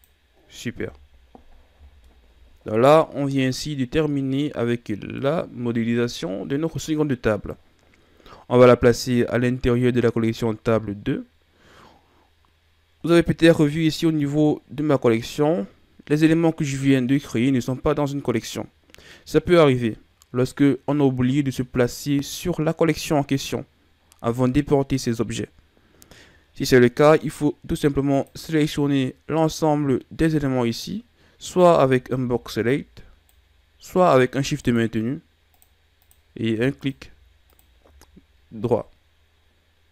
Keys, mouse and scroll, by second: 0.7 Tab, 1.1-1.6 scroll down 4, 1.6 a, 2.0-4.9 middle drag, 28.0 click, 31.7 b, 34.5-35.4 right drag, 35.4 click, 35.9 click, 36.7 shift+click, 37.4 shift+click.